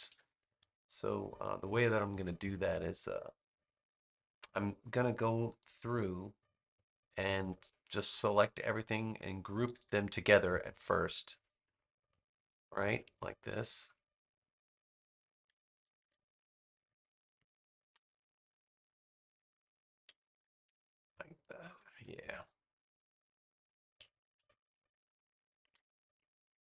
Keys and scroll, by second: 2.3 space, 7.2 space, 9.6 super+=, 11.1 space, 15.9 super+g, 17.1 space, 20.5 super+g, 21.1 space, 24.3 super+g, 24.7 space.